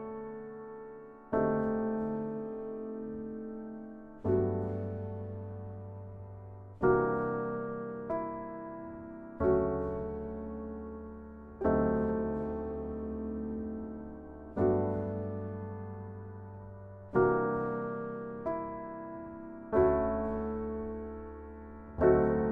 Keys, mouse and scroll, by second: 17.2 click, 17.9 click.